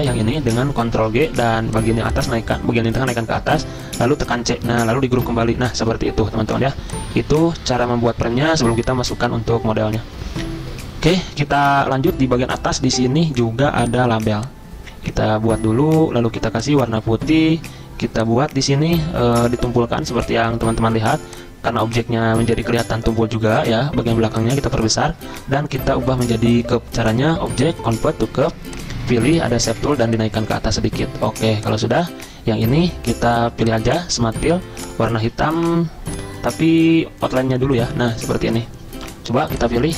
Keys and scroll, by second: 0.1 t, 0.9 ctrl+g, 4.3 c, 5.1 ctrl+g, 6.6 ctrl+g, 7.2 ctrl+z, 35.5 ctrl+z.